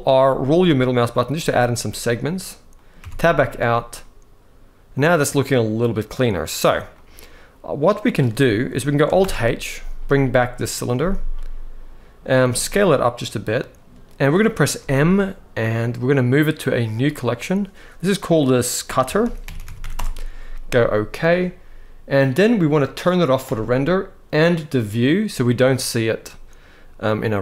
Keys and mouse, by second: 1.3 click, 2.5 middle click, 2.9 Tab, 3.7-6.0 middle drag, 6.7-7.8 middle drag, 9.0 alt+h, 10.3 click, 11.1-11.9 middle drag, 12.2 s, 14.1 middle click, 14.5 m, 19.3 t, 22.2 click, 23.2 click, 24.7 click, 26.0-27.2 middle drag.